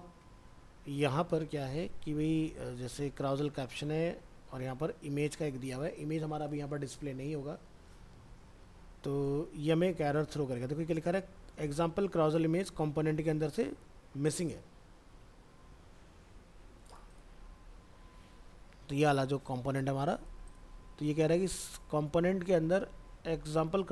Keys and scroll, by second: 15.1 alt+Tab.